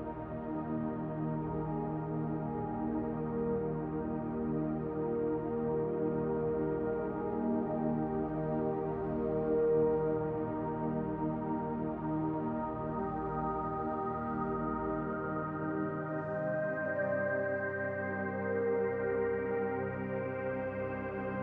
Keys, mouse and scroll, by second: 0.2 s, 8.4 click, 10.6-13.3 drag, 14.2 alt+shift+click.